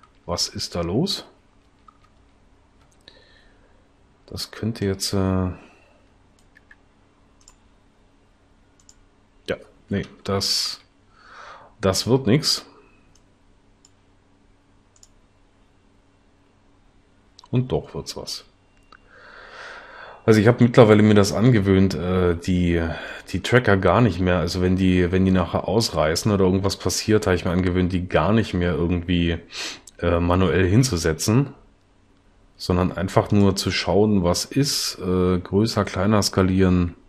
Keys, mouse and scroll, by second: 1.7 Right, 6.7 s, 10.3 Left.